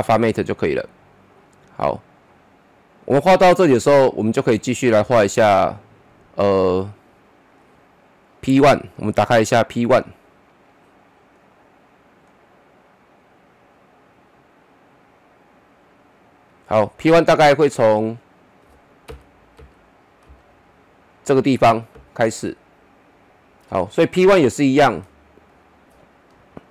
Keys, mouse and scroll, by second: 19.0 Page_Up, 25.0-26.7 middle drag.